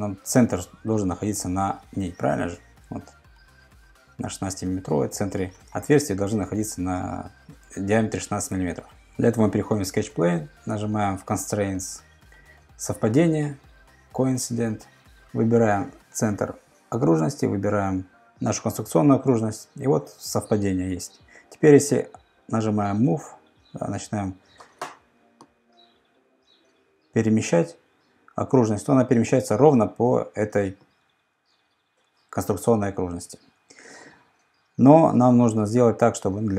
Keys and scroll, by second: 2.2 super+Tab, 8.5 super+Tab, 21.9 m, 33.2 Escape.